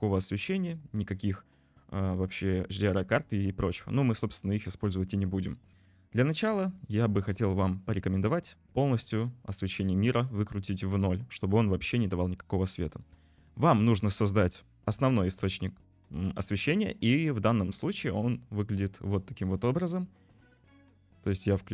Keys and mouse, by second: 6.7 click, 7.2 click.